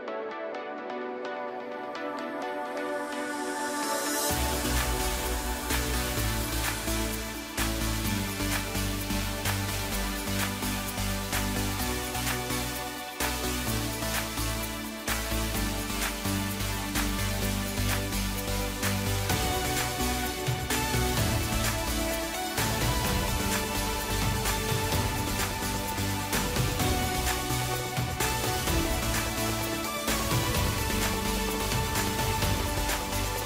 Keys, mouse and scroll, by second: 3.0 click, 4.3 e, 8.5 g, 10.6 1, 11.9 click, 13.3 click, 14.6 v, 17.5 click, 18.2 v, 21.6-22.2 scroll up 2, 22.2-23.7 scroll down 1, 23.7 a, 25.0 3, 25.4-25.7 scroll down 2, 25.7 middle click, 26.6 scroll up 2, 26.8-28.1 middle drag, 28.1 e, 30.3-32.1 middle drag, 32.1 Tab.